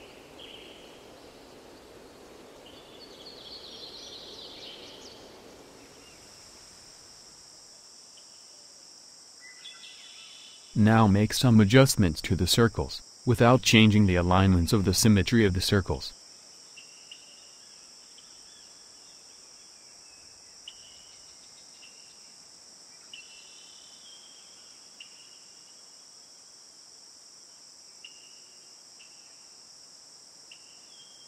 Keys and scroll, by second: 5.7 Delete.